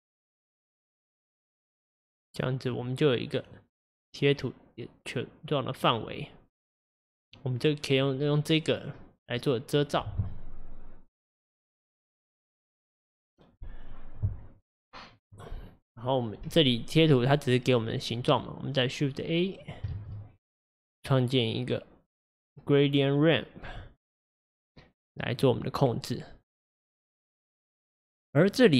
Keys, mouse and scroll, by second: 27.4-28.7 drag.